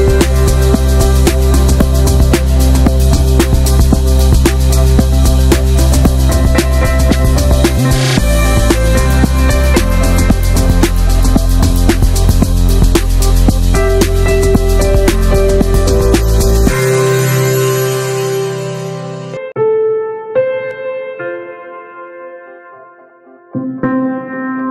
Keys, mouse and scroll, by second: 0.1-0.7 drag, 0.7-1.9 middle drag, 1.9 click, 2.6-4.0 middle drag, 4.0 click, 4.5 click, 7.1 middle click, 7.4 ctrl+s, 7.8 click, 8.0 shift+middle click, 8.0 scroll up 1, 8.2 middle click, 8.4 ctrl+s, 8.6-9.1 shift+middle drag, 9.1 ctrl+s, 9.5 drag, 9.7-10.7 middle drag, 10.7 click, 10.9 shift+click, 11.2 scroll down 1, 11.5 click, 11.8 click, 14.0 ctrl+a, 14.8-15.3 middle drag, 15.3 scroll up 2, 15.5 click, 15.7-16.9 middle drag, 16.9 ctrl+s, 17.5-18.2 shift+middle drag, 18.2 scroll down 2, 18.4-20.8 shift+middle drag, 20.8 scroll up 1, 21.0 click, 21.2 ctrl+a, 21.4-22.1 shift+middle drag, 22.1 ctrl+s, 22.3 shift+middle click, 22.6 click, 22.8 middle click, 23.1 ctrl+s, 23.2-23.6 shift+middle drag, 23.6 ctrl+s.